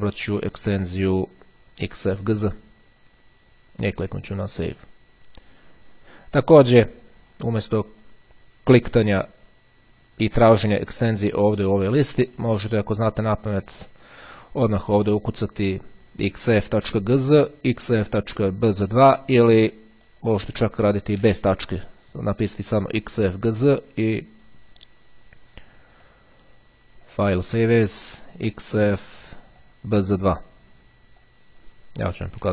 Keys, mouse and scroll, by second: 1.4 click, 4.5 click, 6.9 click, 8.0 click, 9.8-11.0 drag, 12.4 click, 13.7 click, 20.1 click, 20.7 Delete, 22.6 click, 24.1 click, 26.1 click, 27.1 click, 29.0 click, 30.4 click, 31.0 click, 32.1 b.